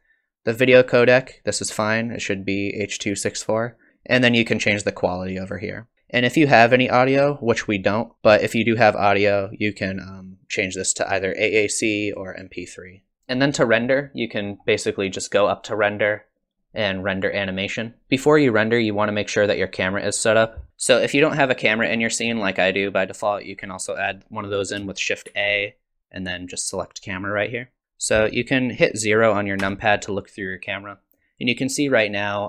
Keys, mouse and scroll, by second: 9.5 click, 13.2 scroll up 10, 15.5 click, 20.7 click, 25.3 shift+a, 27.8 click, 29.6 KP_0.